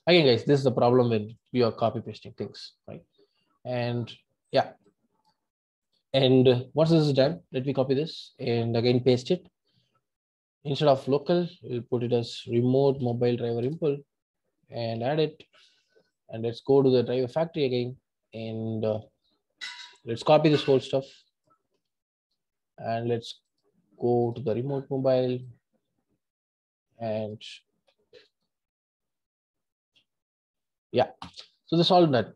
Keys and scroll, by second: 1.2 Delete.